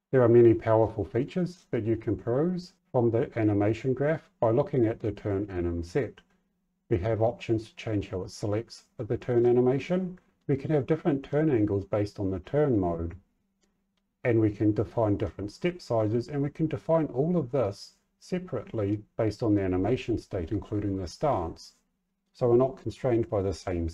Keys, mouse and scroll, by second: 0.8 middle click, 1.1 middle click, 1.5 middle click, 2.2 middle click, 9.3 middle click, 17.6 middle click.